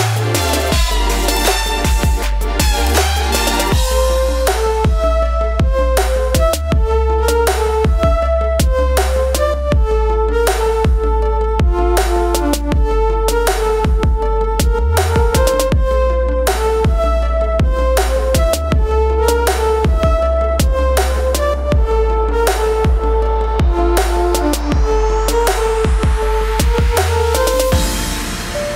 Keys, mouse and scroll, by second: 1.8 click, 7.4 click, 8.9 click, 10.7 click, 15.4-16.0 scroll down 1, 16.5-17.0 scroll up 1, 18.0 click, 19.0 right click, 20.0 click, 21.4-28.7 drag.